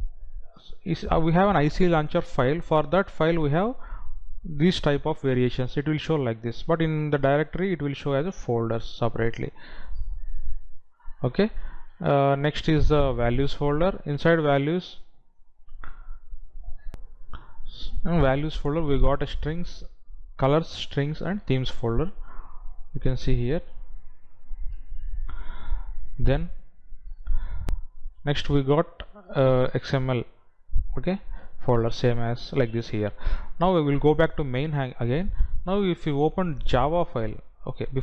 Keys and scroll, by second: 17.1 F9.